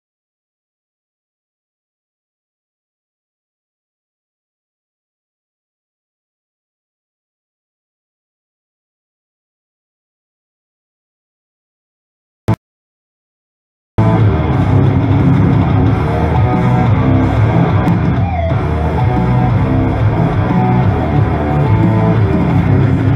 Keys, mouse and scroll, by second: 0.2 scroll down 1, 0.5-0.9 scroll up 1, 1.4 click, 2.4 Delete, 3.4 click, 4.0 Delete, 4.6 scroll up 1, 5.9 right click, 6.7 click, 7.6 right click, 8.0 click, 11.3 right click, 12.2 click, 12.5 space, 13.7 right click, 14.0 space, 17.7 click, 17.9 space, 21.8 right click.